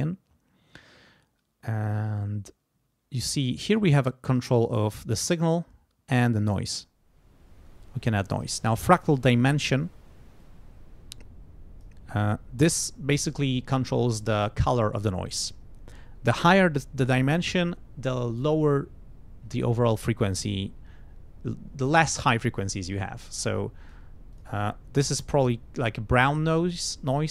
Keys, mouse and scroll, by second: 3.7 click, 6.1-8.6 drag, 10.4-12.0 drag, 23.5 click, 24.3 click.